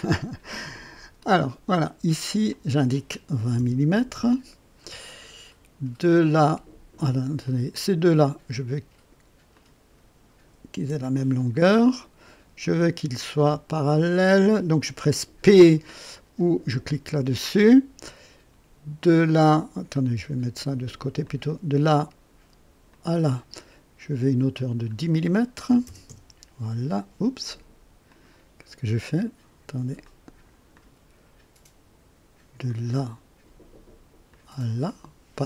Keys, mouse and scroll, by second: 1.1 click, 2.5 click, 3.3 KP_2, 3.5 KP_0, 4.1 KP_Enter, 7.4 click, 8.1 click, 9.5 click, 10.8 e, 12.6 click, 14.1 click, 16.9 p, 19.1 click, 19.9 click, 21.2 click, 22.9 click, 24.5 click, 25.6 KP_1, 25.8 KP_0, 26.0 Return, 28.0 click, 30.0-31.1 drag, 32.6 click, 34.3 click.